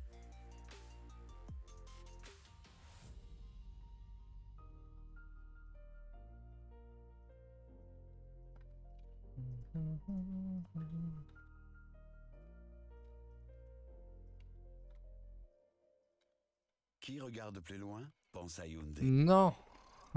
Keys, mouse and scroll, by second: 0.9 click, 1.8 s, 4.3 alt+Left, 4.8 s, 5.8 r, 6.7 g, 8.1 r, 8.6 g, 9.0 s, 9.6 g, 11.4 r, 12.5 g, 14.9 r, 15.6 g, 17.3 s.